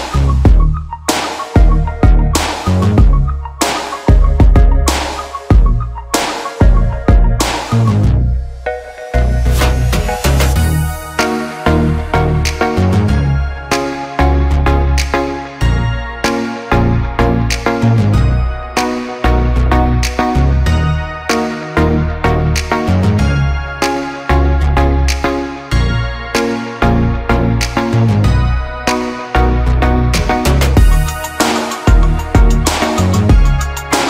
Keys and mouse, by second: 0.1 Tab, 0.1 ctrl+a, 0.2 ctrl+a, 0.2 middle click, 0.4 /, 0.5-1.7 shift+middle drag, 1.9 Tab, 2.1 middle click, 2.6 3, 3.1 middle click, 3.5 Tab, 3.5 p, 3.6 click, 3.9-5.8 shift+middle drag, 4.3 /, 5.1 Tab, 5.1 3, 6.2 click, 6.4 click, 6.4 l, 6.8 l, 6.9 click, 7.4 l, 7.5 click, 7.8 click, 8.1 middle click, 8.5 middle click, 9.3 middle click, 9.5 middle click, 9.7 KP_7, 9.8 shift+middle click, 10.2 alt+z, 10.3-12.1 middle drag, 12.4 shift+middle click, 12.7 middle click, 13.3 middle click, 13.7 middle click, 14.5 middle click, 14.7 middle click, 15.1 middle click, 15.1-17.2 typing, 16.3 click, 17.2 click, 17.6 middle click, 18.2 p, 18.3 Tab, 18.6 middle click, 18.8-19.4 shift+drag, 19.4-21.9 middle drag, 20.2 /, 21.9 /, 22.1-23.4 middle drag, 23.6 middle click, 23.6 /, 23.8 Tab, 23.9 3, 25.3 middle drag, 25.6 /, 25.6 middle drag, 25.8-26.8 middle drag, 27.1 middle click, 27.3 middle click, 27.5 middle click, 27.7 middle click, 28.0 middle click, 28.2 /, 28.3 click, 28.4 Tab, 28.4 middle click, 28.7 3, 28.7 middle click, 29.2 p, 29.3 Tab, 29.6 shift+middle click, 29.7 /, 30.4 drag, 30.5-30.8 shift+middle drag, 30.8 Tab, 31.1 3, 31.3 ctrl+z, 31.6 KP_3, 32.3 alt+z, 32.3 middle click, 32.5 middle click, 33.2 middle click, 33.6 middle click, 33.7 alt+z, 33.7 middle click, 34.0 alt+z.